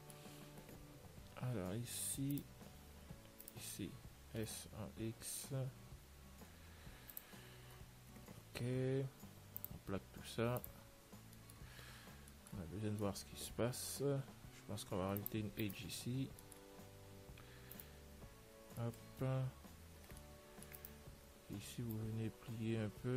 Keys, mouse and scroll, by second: 2.6-7.4 right drag, 7.9-9.9 middle drag, 9.9-12.8 drag, 11.5-15.0 middle drag, 15.2 ctrl+r, 16.5-18.0 middle drag, 18.0-19.8 right drag, 19.2 middle click, 19.4 z, 20.1 c, 21.3 z, 21.5 middle click, 22.2 click.